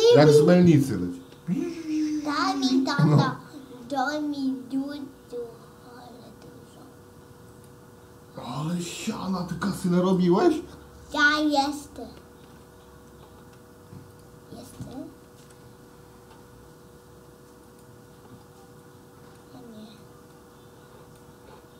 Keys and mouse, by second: 1.8 shift+d, 9.8-10.2 right drag, 12.5 shift+d, 15.4 shift+d, 18.8-19.5 drag, 20.0-21.3 drag.